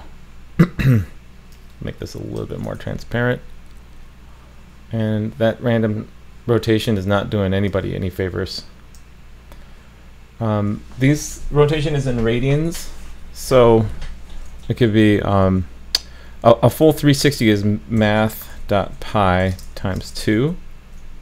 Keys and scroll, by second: 2.8 super+s.